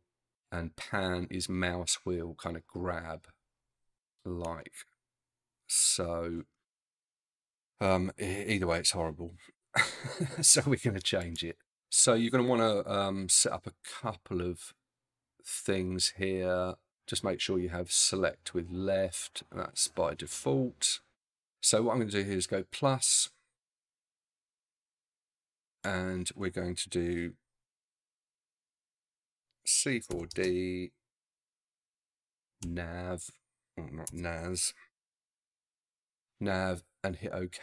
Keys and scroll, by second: 28.0-30.3 typing, 31.7 shift+a, 32.5 a, 32.6 z, 34.1 BackSpace, 35.4 v.